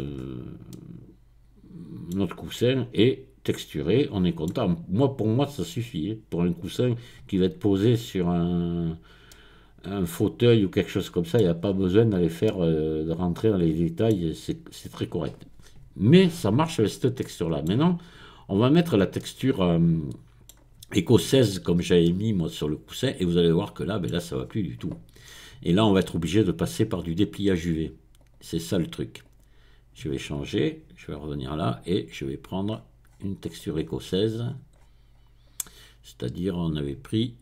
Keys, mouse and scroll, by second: 0.2-0.7 scroll up 2, 2.1-2.6 scroll down 2, 6.8-7.6 scroll down 2, 8.0-8.7 scroll up 2, 9.3-11.6 middle drag, 11.6-12.1 scroll up 1, 12.1-13.2 scroll down 1, 13.2-14.6 middle drag, 14.8 click, 16.7-17.2 scroll down 2, 17.2 middle click, 18.4-19.2 scroll down 2, 19.2-20.8 middle drag, 21.4-22.0 scroll down 2, 22.0-24.4 middle drag, 24.4-25.2 scroll up 2, 28.2 click, 29.2 click, 31.1 click, 31.3 middle click, 32.6-35.8 scroll down 2.